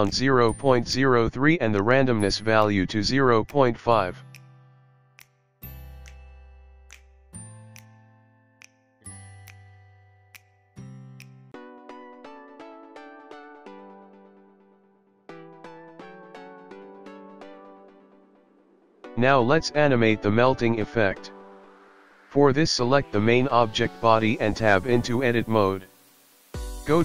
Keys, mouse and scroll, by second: 0.3 click, 0.8 click, 2.0 click, 7.4 click, 11.8 click, 16.1 click, 17.3 click, 20.9 Tab, 21.5 middle click, 23.6-24.5 scroll down 1, 24.5 Tab, 24.5-24.9 scroll down 2, 24.9 click.